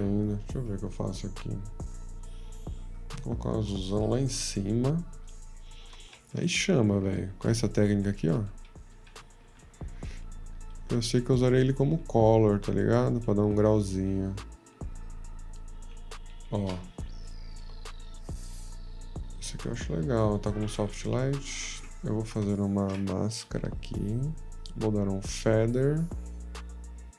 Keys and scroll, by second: 16.3 -, 21.6 ctrl+d, 21.6 ctrl+z, 21.8 q, 23.4 m.